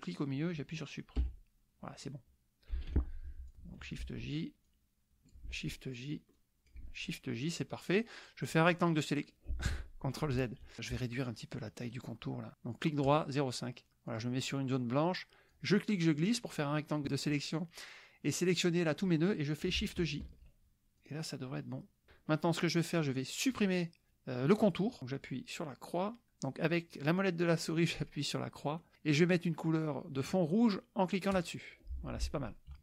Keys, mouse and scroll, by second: 1.2 Delete, 3.5 click, 4.1 shift+j, 4.7 shift+click, 5.5 shift+j, 5.7 shift+click, 6.4 shift+click, 6.9 shift+j, 7.6 click, 8.7-9.9 drag, 10.5 ctrl+z, 11.9 right click, 13.1 click, 14.1 click, 15.5-17.0 drag, 20.2 shift+j, 21.0 click, 28.9 click, 31.3 click.